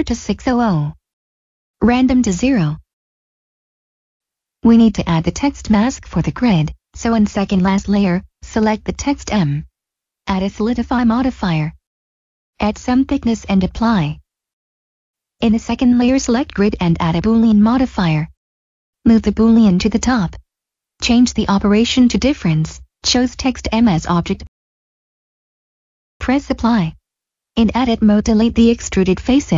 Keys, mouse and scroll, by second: 2.2 click, 3.3 middle click, 7.2 click, 8.1 middle click, 9.2 click, 9.8 click, 11.6 click, 14.6 click, 17.2 click, 18.0 click, 19.8 click, 20.5 middle click, 21.0 click, 24.5 click, 25.7 middle click, 27.0 middle click, 27.8 Tab, 28.3-28.6 scroll down 1, 28.9 b.